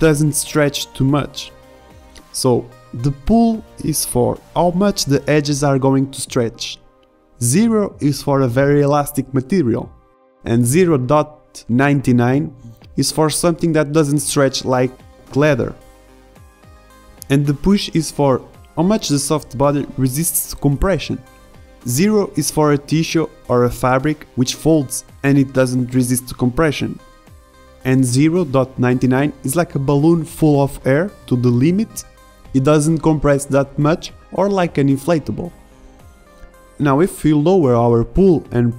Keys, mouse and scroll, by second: 3.2 alt+a, 3.8 shift+Left, 4.2 alt+a, 6.7 alt+a, 8.9 alt+a, 11.6 alt+a, 14.1 shift+Left, 15.4 alt+a, 19.0 alt+a, 19.8 shift+Left, 20.7 alt+a, 24.1 a, 25.5 alt+a.